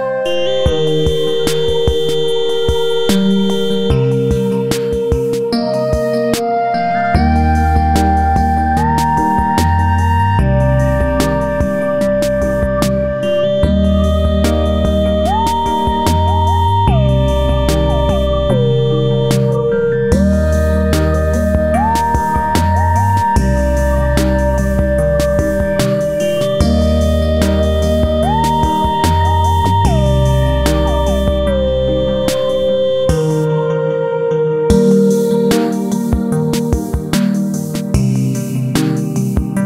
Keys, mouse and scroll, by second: 0.2-2.0 drag, 2.2-3.8 drag, 3.9 click, 5.2-8.0 drag, 9.1 click, 10.5 click, 12.9-14.7 drag, 14.7 click, 15.9 scroll up 1, 17.6 click, 19.4 click, 20.1-21.5 drag, 21.6-23.5 drag, 23.5 F4, 23.9 scroll up 1, 24.6 click, 25.6 click, 26.9-29.4 drag, 30.2-32.1 drag, 32.9-34.7 drag, 35.6 right click, 36.2 Up, 37.7 click, 38.1 Up, 39.0 click.